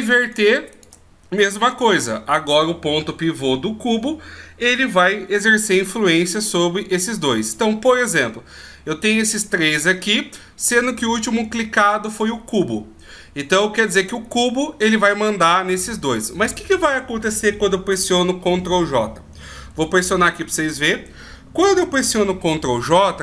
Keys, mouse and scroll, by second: 0.2 shift+right click, 20.4 ctrl+j.